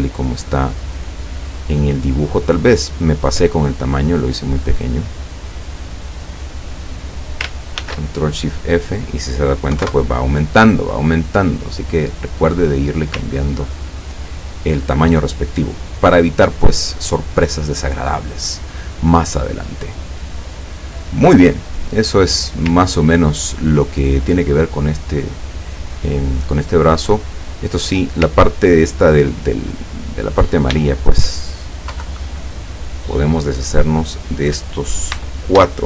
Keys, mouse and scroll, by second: 3.9-5.5 drag, 6.6 click, 7.8 ctrl+shift+f, 8.8 click, 9.8 KP_1, 9.9 KP_Enter, 11.4 click, 13.4-14.0 ctrl+scroll down 2, 14.1 ctrl+scroll down 2, 21.6 click, 22.9 ctrl+scroll down 2, 27.2 click, 27.8 click, 28.4-28.9 ctrl+scroll up 2, 29.9 click, 31.1 shift+click, 32.0 Delete, 32.9 click, 34.1 click, 35.3 shift+click.